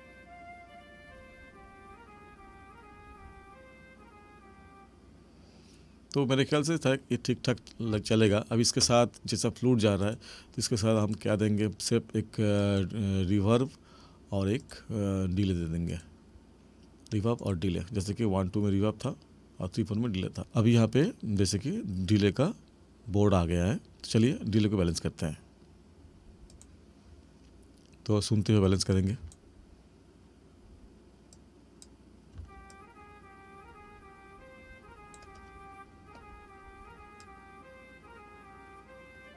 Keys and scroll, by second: 7.9 space, 29.2 space, 32.4 space.